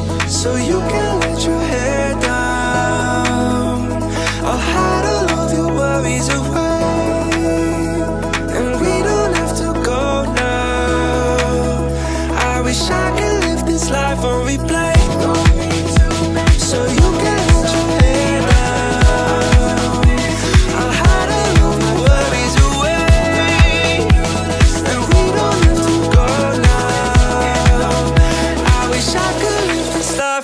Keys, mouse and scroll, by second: 1.5-2.2 drag, 3.9-4.7 drag, 5.1-5.6 middle drag, 6.0 right click, 7.1-8.1 middle drag, 12.7-13.4 drag, 15.8 click, 17.6 click, 19.5 click, 20.4-30.4 drag.